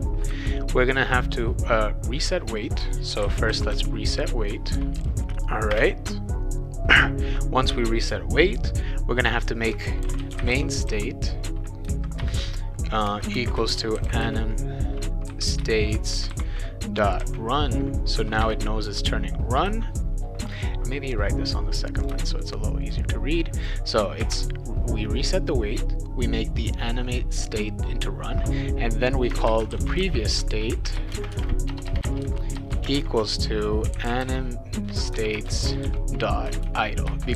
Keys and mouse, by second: 2.9-5.7 typing, 5.1 Return, 9.8-11.4 typing, 12.1 Return, 13.1-14.7 typing, 15.6 Return, 16.1 shift+;, 17.2 shift+r, 18.4 Return, 19.6 ;, 21.9 click, 23.6 click, 24.2 space, 29.2-37.3 typing, 30.9 Return, 35.3 Return, 37.1 Return.